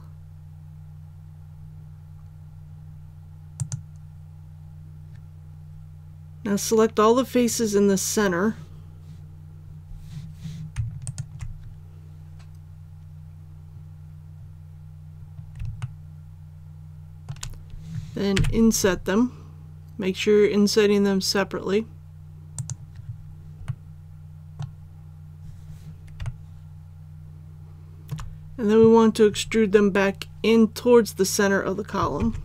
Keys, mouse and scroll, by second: 5.5 alt+a, 11.0 alt+right click, 13.5-14.3 scroll up 1, 15.8-17.2 shift+middle drag, 18.3 shift+i, 22.5 click, 23.6-25.1 middle drag, 25.1 scroll up 1, 26.2-28.1 shift+middle drag, 32.2 alt+e.